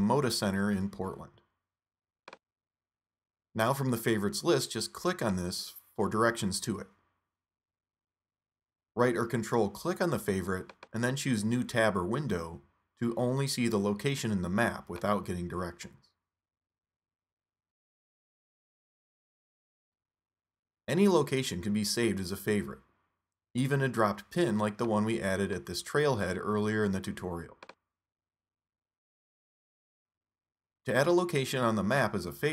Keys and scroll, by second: 0.0-0.3 typing.